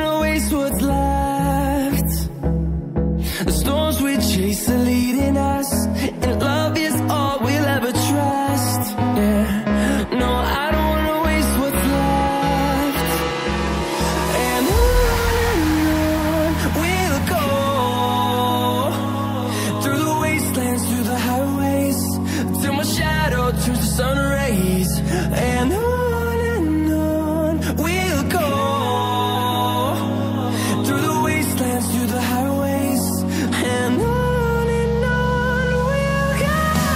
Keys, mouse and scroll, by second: 4.8 scroll up 1, 5.4 click, 6.6 click, 8.0 scroll down 1, 9.0 click, 10.5 scroll up 1, 11.6 click, 13.0 scroll down 1, 13.3 scroll up 1, 14.4 click, 15.0 ctrl+double click, 15.8 click, 17.2 Down, 17.9 Down, 18.0 Down, 18.2 Left, 19.1 Left, 19.2 Left, 19.4 Down, 19.7 scroll down 1, 20.7-21.5 scroll down 1, 21.9 scroll up 1, 22.7 click, 24.7 Down, 25.5 Down, 25.6 Down, 25.9 scroll down 1, 27.4 click, 28.6 scroll up 1, 29.4 click, 30.4 click, 30.4 scroll down 1, 32.3 scroll down 1, 35.3 click.